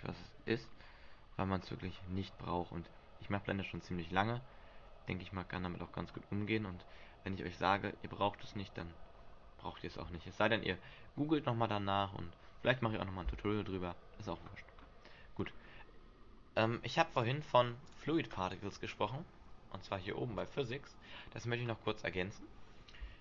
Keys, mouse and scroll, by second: 0.8-1.7 scroll up 7, 1.7 scroll down 2, 2.7 middle click, 2.7 scroll down 7, 6.0-6.6 scroll up 2, 6.8 middle click, 6.8 scroll up 1, 14.4-15.6 scroll down 2, 15.6-16.0 scroll up 4, 17.3 click, 18.0 click, 20.6 click, 22.0-22.6 scroll down 4.